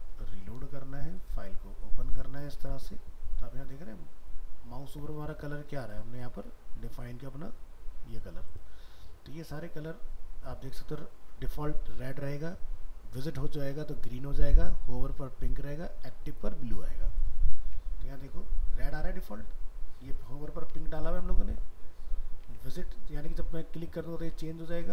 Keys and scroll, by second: 17.7 alt+Tab, 20.8 alt+Tab.